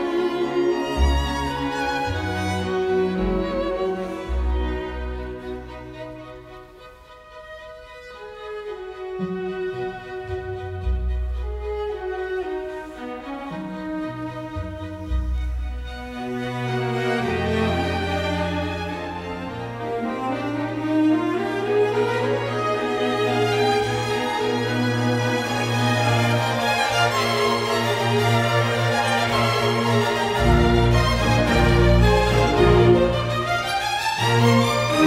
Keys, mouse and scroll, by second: 4.4 ctrl+t, 5.6 Escape, 7.4 Delete, 16.4 t, 16.5 space, 33.0 t, 33.1 space.